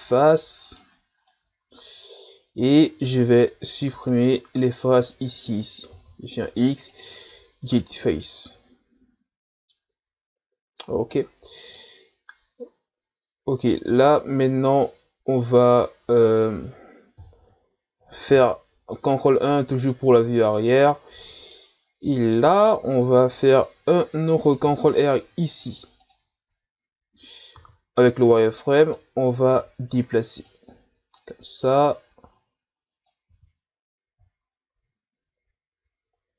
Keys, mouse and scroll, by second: 0.0 middle click, 0.7 right click, 1.0-1.3 scroll down 2, 1.3-3.3 middle drag, 3.3 scroll up 2, 4.1 shift+right click, 4.8-5.9 middle drag, 5.9 x, 7.6-10.1 middle drag, 10.1-10.5 scroll down 1, 11.2-14.2 middle drag, 17.2 KP_1, 18.4 ctrl+KP_1, 21.0-22.6 shift+scroll up 3, 22.6 ctrl+Tab, 24.6 ctrl+r, 26.0 click, 26.7-27.3 ctrl+scroll down 1, 27.3 scroll up 1, 27.6 z, 28.8 right click, 29.5 b, 31.2-33.3 drag, 33.3 z, 33.7-34.6 scroll down 5.